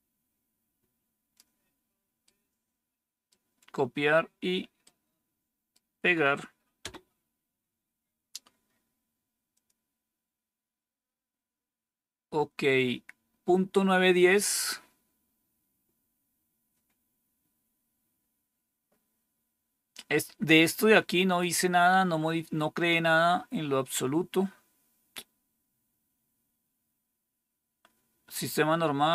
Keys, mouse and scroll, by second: 2.1-3.2 right drag, 4.7 right click, 6.7 Return, 9.4 click, 27.7-28.0 scroll down 2.